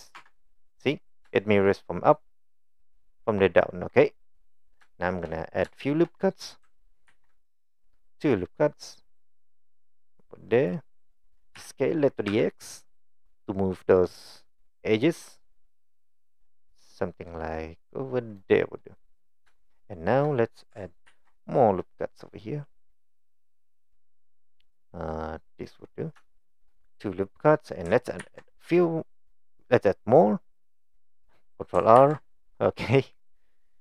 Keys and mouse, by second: 0.2 Tab, 4.9 shift+middle click, 5.7 shift+middle click, 7.1 ctrl+r, 11.6 s, 19.0 click, 19.5 shift+middle click, 21.1 ctrl+r, 26.3 shift+middle click, 28.2 ctrl+r, 32.0 ctrl+r.